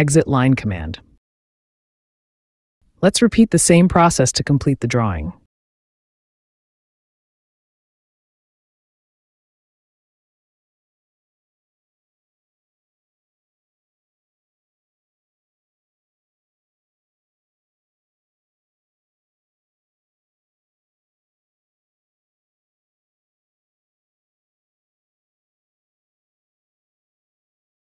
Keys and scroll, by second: 6.4 l, 7.8 space, 9.0 t, 9.1 a, 9.4 n, 10.4 space, 18.9 t, 19.0 a, 19.5 n, 20.2 space, 24.3 l, 26.0 space.